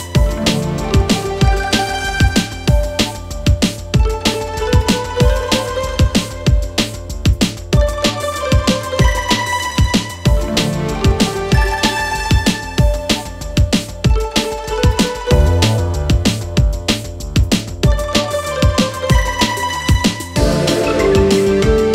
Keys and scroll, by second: 0.3 F2, 1.3 shift+Page_Up, 9.0 Escape, 18.1 space, 18.5 F4, 19.2 Escape, 19.6 F2.